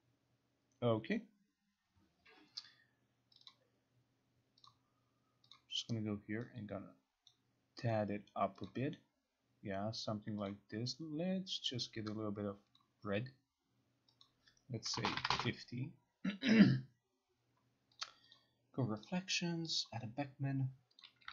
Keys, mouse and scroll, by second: 3.5 click, 3.6 click, 4.8 click, 5.6 click, 7.4 click, 8.8 click, 10.6 click, 11.9 click, 12.9 click, 14.3 click, 14.8-15.5 typing, 18.1 click, 18.4 click, 19.2 click, 19.9 click, 21.1 click.